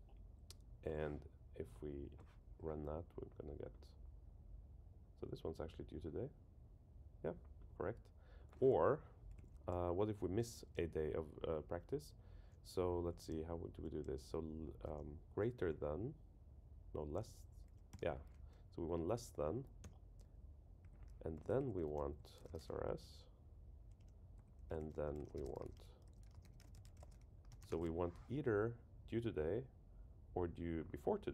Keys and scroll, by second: 19.5 Down, 19.8 Return, 21.8 Right, 24.0 Return, 24.3 Right.